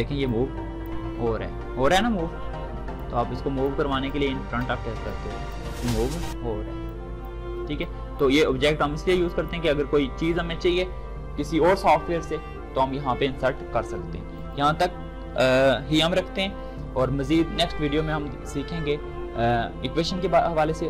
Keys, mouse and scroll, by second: 2.7-9.0 drag, 14.1 click, 14.2 click.